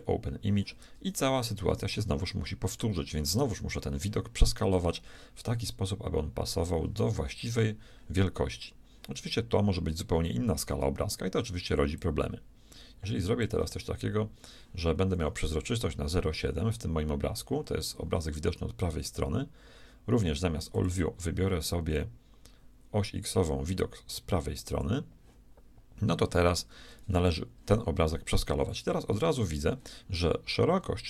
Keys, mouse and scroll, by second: 2.1 shift+middle click, 12.0-14.0 drag, 20.7-22.7 drag, 28.7-30.7 drag.